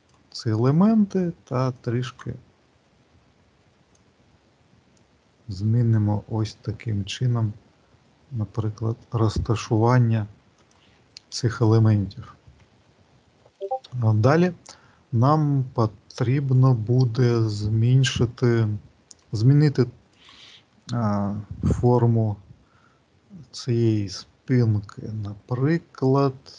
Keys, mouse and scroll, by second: 1.6 click, 3.7 click, 11.3 click, 13.3 middle click, 16.8-18.2 scroll up 2, 18.2 middle click, 20.1 click, 21.7 click, 25.8 click.